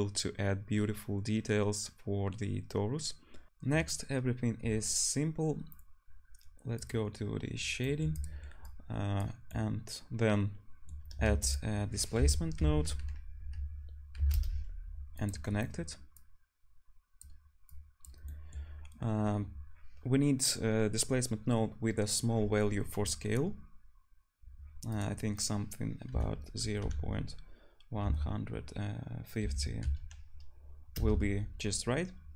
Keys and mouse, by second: 3.5-6.9 middle drag, 6.9 drag, 8.1-15.3 drag, 11.2 shift+a, 16.1-23.2 drag.